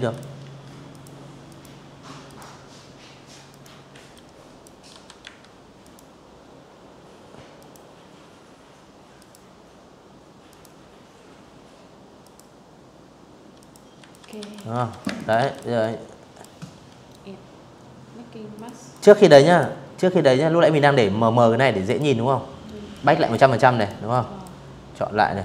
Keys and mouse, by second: 1.2 click, 1.6 z, 1.8 click, 2.6 v, 2.9 a, 3.4 click, 5.2 click, 6.8 click, 8.1 click, 9.9 click, 11.2 click, 11.4-13.0 typing, 11.8 click, 12.2 click, 12.5 click, 12.8 click, 13.2 click, 13.4-14.0 drag, 16.2 click, 16.6 click, 17.1 click, 19.5 click, 20.6 click, 21.4 click, 21.8 click, 23.7 click, 24.8 click, 25.3 click.